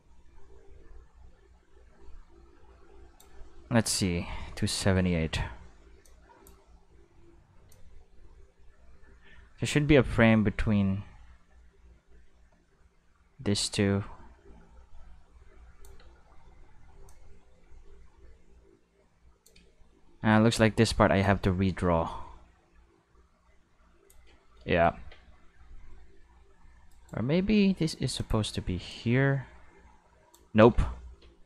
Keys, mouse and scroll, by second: 3.4 middle click, 4.3 middle click, 6.0-6.4 drag, 6.7 space, 7.7 space, 7.7-15.8 drag, 16.0 space, 16.9 space, 17.1-19.4 drag, 21.2-24.1 drag, 24.8 middle click, 25.0 Tab, 26.9 right click, 27.3 shift+s, 28.2 click, 28.9-30.3 drag, 30.6 ctrl+z, 30.8 ctrl+z.